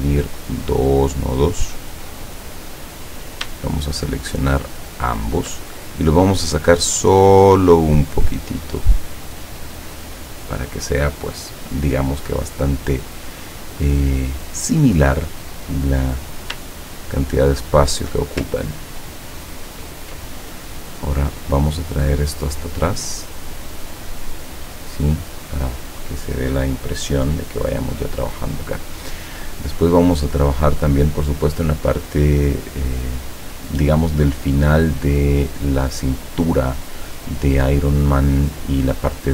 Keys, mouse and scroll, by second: 0.7 click, 2.3 click, 3.0 click, 5.3 shift+click, 6.6-10.4 drag, 15.9 click, 17.6 shift+click, 18.7-20.2 ctrl+drag, 21.0 click, 23.8 click, 25.5 click.